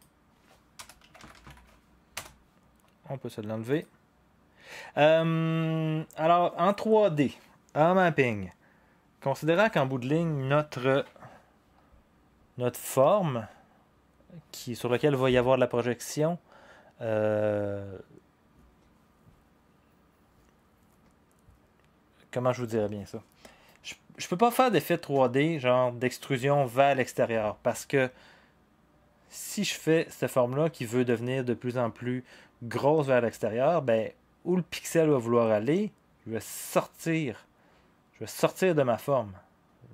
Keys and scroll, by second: 0.7 Return, 0.7-1.9 typing, 2.2 Return, 3.6-4.3 typing.